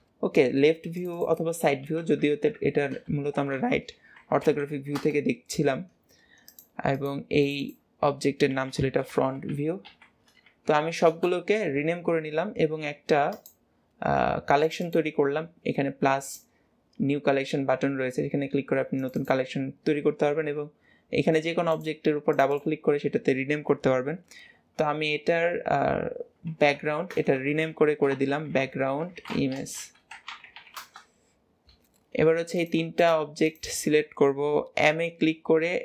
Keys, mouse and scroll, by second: 0.9 click, 1.1-2.1 drag, 2.1 Right, 2.3 Right, 6.3 click, 6.8 click, 7.3 click, 7.5-10.6 drag, 13.2-14.6 drag, 14.7-16.2 drag, 18.9 click, 19.1-21.7 drag, 22.2 click, 22.4-25.5 drag, 27.1 BackSpace, 27.2 BackSpace, 32.4 click, 32.9 shift+click, 33.3 shift+click, 34.7 m.